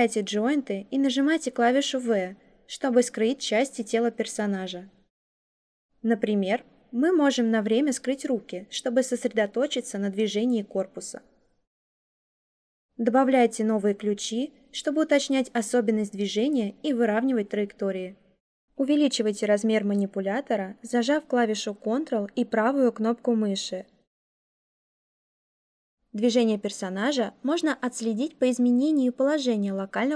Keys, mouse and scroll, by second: 1.9 v, 20.7-25.8 ctrl+right drag.